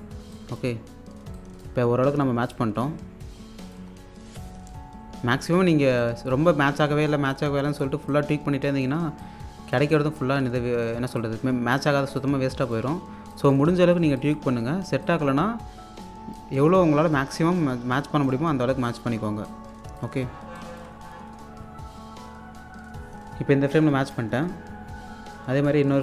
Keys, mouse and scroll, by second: 0.2 scroll down 1, 0.3 alt+click, 0.9-1.2 scroll up 1, 1.3 alt+click, 1.9 scroll down 1, 3.5 scroll down 1, 3.6 alt+click, 3.9-4.5 scroll up 1, 6.0 scroll up 1, 13.1 scroll down 1, 13.3 alt+click, 13.7-14.0 scroll up 1, 14.1 alt+click, 14.5-15.0 scroll up 1, 15.0 click, 16.2-16.9 scroll down 2, 16.9-17.3 scroll up 1, 18.4-18.8 scroll down 1, 18.9 alt+click, 20.2 scroll down 1, 20.6 alt+click.